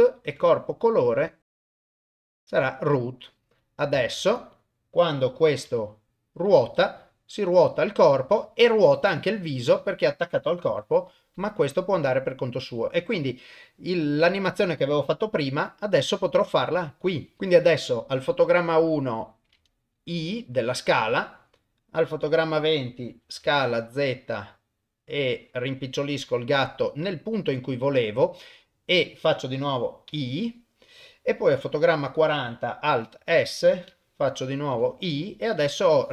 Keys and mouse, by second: 0.3 click, 1.0 click, 1.8 drag, 2.2 click, 3.6 click, 4.2 ctrl+Tab, 4.6 click, 5.7 r, 9.8 click, 10.7 g, 12.6 click, 15.4 s, 17.4 ctrl+z, 20.2 i, 22.1 click, 23.2 s, 30.1 i, 31.9 click, 33.2 alt+s, 34.7 i, 35.9-36.1 drag.